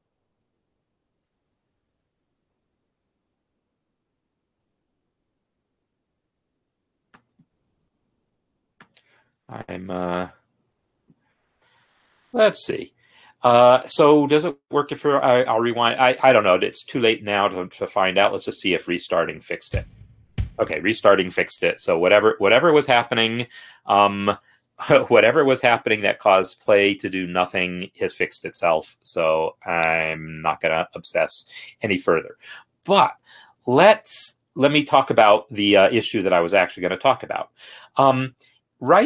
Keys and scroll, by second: 19.4 space.